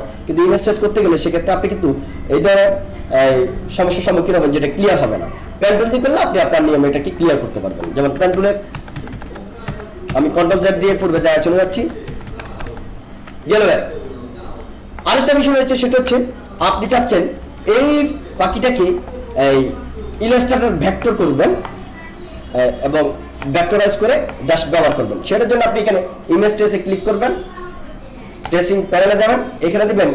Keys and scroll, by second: 8.3 ctrl+z, 16.7 ctrl+=.